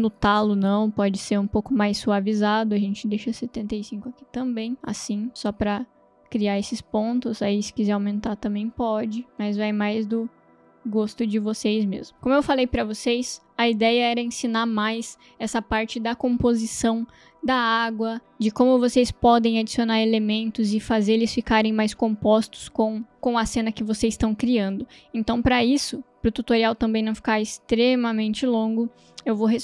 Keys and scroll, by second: 1.9 t, 3.0-3.9 typing, 7.9 8, 8.2 0, 8.5 Return.